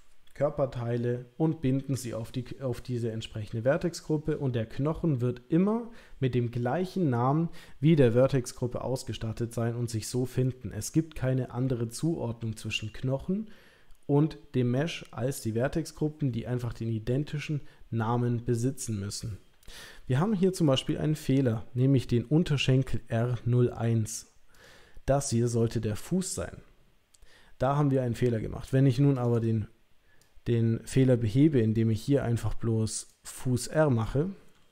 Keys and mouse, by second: 24.5 click, 29.1 click, 29.3-34.7 drag.